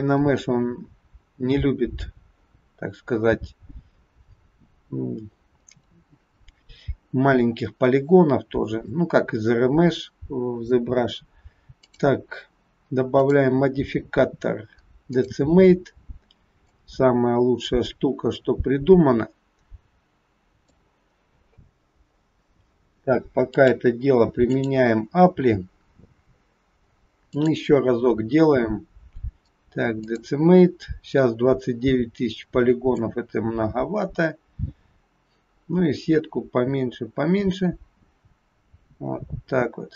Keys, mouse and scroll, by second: 0.2-1.6 scroll down 7, 11.8 click, 13.2 click, 16.7 click, 23.5 click, 27.4 click, 33.0 click.